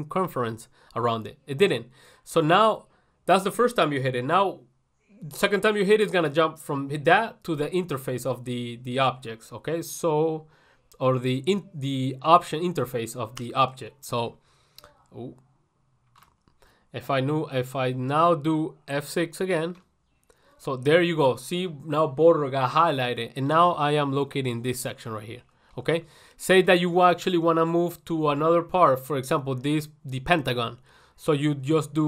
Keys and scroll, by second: 16.5 ctrl+1.